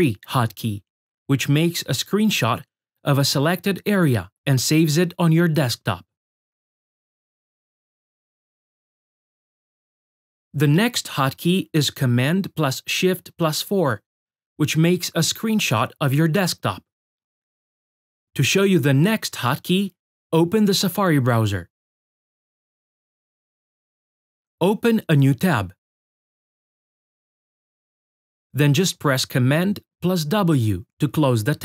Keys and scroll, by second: 10.5 shift+super+4.